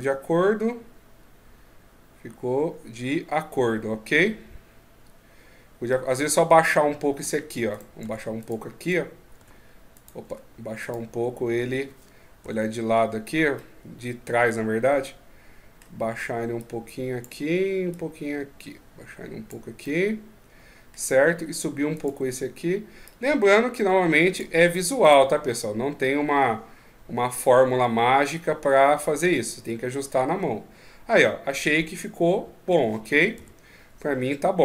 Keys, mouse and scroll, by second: 7.0 Tab, 7.5 right click, 7.8 Tab, 8.2 right click, 8.5 right click, 9.1 Tab, 9.7 right click, 10.0 Tab, 10.6 right click, 12.2 KP_3, 13.3 middle click, 14.8 middle click, 16.4 click, 19.6 middle click, 21.7 right click, 22.8 click, 24.4 Tab, 24.8 right click, 25.0 Tab, 25.3 middle click, 33.1 KP_3.